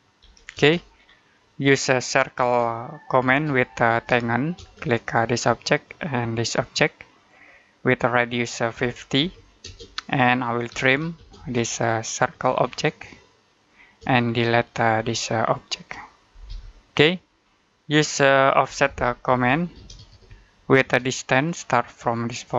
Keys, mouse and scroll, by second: 0.1 1, 0.4 space, 0.9-1.3 scroll down 1, 1.3 middle click, 2.2-4.4 typing, 5.7 click, 8.6-11.2 typing, 11.6 click, 12.5-13.2 scroll up 1, 13.4 click, 13.9 space, 14.0-14.4 scroll down 1, 14.4 middle click, 14.9 click, 16.3 Delete, 16.9 middle click, 17.3-17.7 scroll up 1, 17.7 middle click, 18.5-20.7 typing, 21.2 scroll up 1, 21.4-22.4 scroll down 1, 22.4 click.